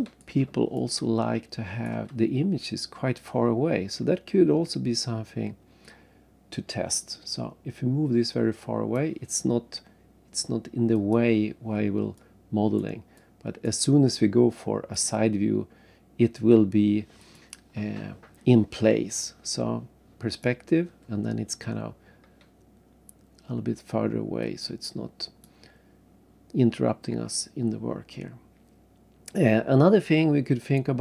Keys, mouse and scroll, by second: 0.8 shift+right click, 2.4-3.0 scroll down 2, 5.8 click, 10.9 click, 12.2 right click, 13.2 right click, 14.9 click, 17.2 click, 20.3 click, 22.8 scroll down 3, 24.4 click, 25.9 scroll up 1, 28.6 scroll up 2, 29.6-30.3 scroll down 3, 30.8-31.0 scroll up 2.